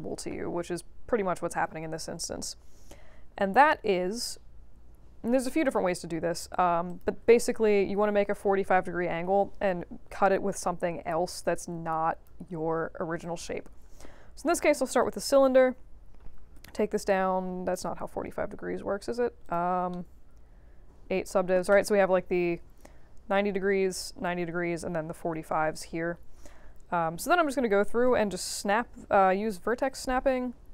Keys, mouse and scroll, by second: 6.8 click, 9.3 f, 9.6-10.1 scroll down 2, 10.1 scroll up 2, 11.2-12.2 drag, 13.2 click, 15.0 click, 16.5 6, 16.6 Return, 19.4 click, 19.9-21.0 middle drag, 26.4 w, 26.9 middle click, 27.7 v, 28.0-29.8 drag, 30.4 alt+middle click.